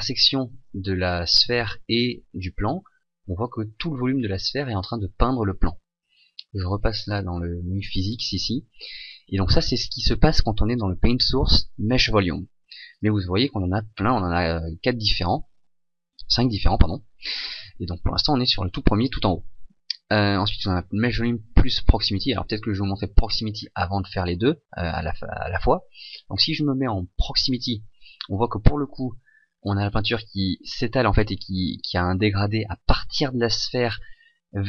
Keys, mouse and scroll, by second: 0.1 shift+middle click, 7.2 click.